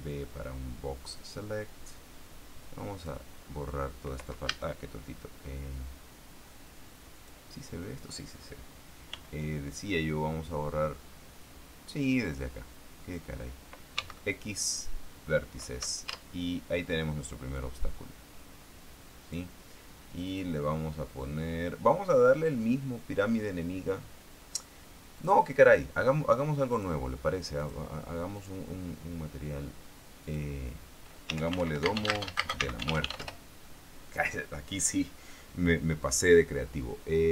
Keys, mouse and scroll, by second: 1.5-3.6 drag, 4.8 a, 7.5 click, 7.9 click, 9.5 b, 12.3-13.7 drag, 14.3 x, 15.1 click, 16.5 Tab, 17.9-19.9 drag, 20.6 click, 25.5 click, 27.1 click, 27.9 click, 28.7 click, 30.6 click, 31.6-33.6 typing, 33.6 Return, 36.4 click.